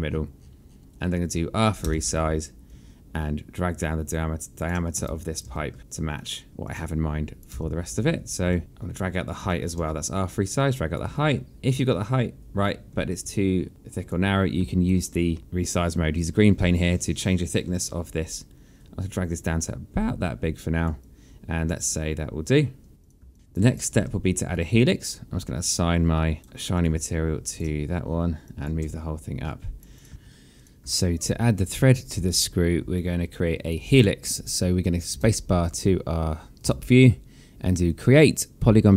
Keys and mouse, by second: 1.5 click, 1.8 r, 2.6 click, 4.9 space, 5.8 alt+click, 6.1 click, 6.5 w, 6.6 click, 7.5 r, 8.5 alt+click, 8.9 click, 9.5 alt+click, 9.8 w, 10.1 click, 11.1 alt+click, 14.6 alt+click, 15.4 r, 16.1 click, 21.0 alt+click, 23.3 alt+click, 23.8 alt+click, 24.9 right click, 27.2 click, 27.4 alt+click, 28.9 click, 29.2 w, 29.9 click, 31.7 alt+click, 33.7 alt+click, 35.8 space, 37.3 space, 38.6 click.